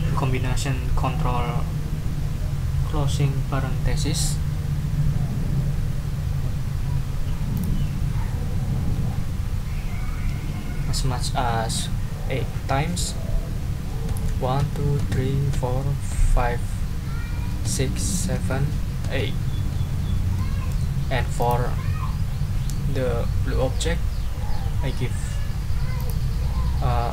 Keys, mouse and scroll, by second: 7.5 click, 14.1 ctrl+0, 17.6 ctrl+0, 18.3 ctrl+0, 19.0 ctrl+0, 20.3 click, 20.7 ctrl+middle click, 21.0 ctrl+scroll down 2, 21.4 ctrl+click, 26.0 click.